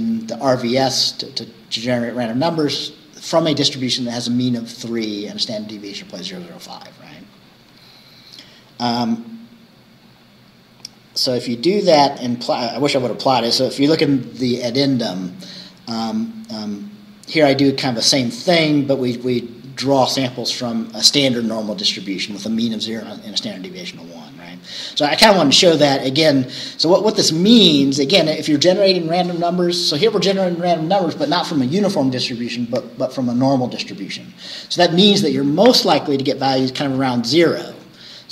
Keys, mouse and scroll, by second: 7.5-8.3 scroll down 2, 9.1-10.1 scroll up 1, 10.1-10.4 scroll up 1, 10.4-10.9 scroll down 2, 10.9 click, 11.7-12.1 scroll down 2, 12.7-13.3 scroll down 4, 16.3 scroll down 1, 16.9-17.2 scroll up 1, 23.8-24.2 scroll down 1, 26.1 scroll up 1.